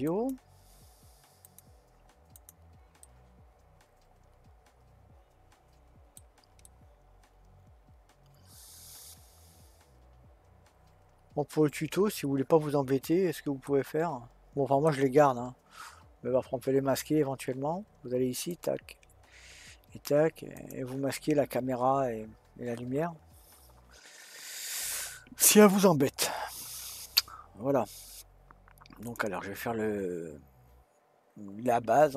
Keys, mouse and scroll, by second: 2.0-2.3 right drag, 2.3 click, 3.0-6.1 middle drag, 6.7-9.7 middle drag, 13.6-16.7 middle drag, 18.8 click, 20.5 click, 29.0 click.